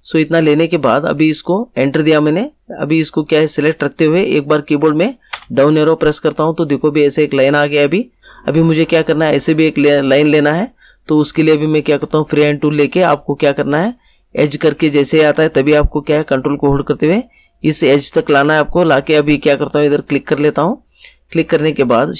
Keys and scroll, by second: 5.3 Down.